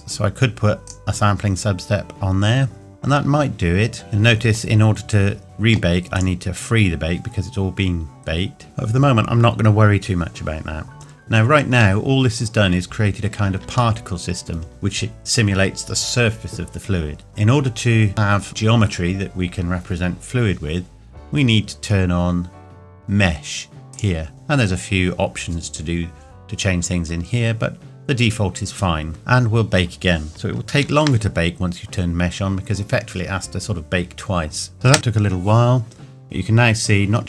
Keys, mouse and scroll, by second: 0.9 click, 4.0 scroll down 1, 6.2 click, 8.0-8.4 scroll up 1, 12.0 middle click, 14.0 shift+middle click, 21.1-23.9 scroll down 2, 23.9 click, 29.1-30.1 scroll down 1, 34.7 click, 34.9 space.